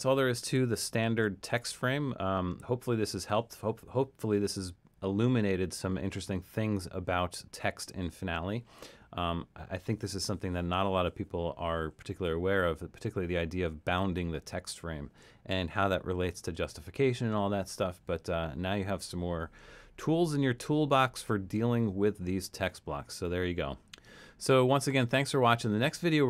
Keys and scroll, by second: 1.1 super+-.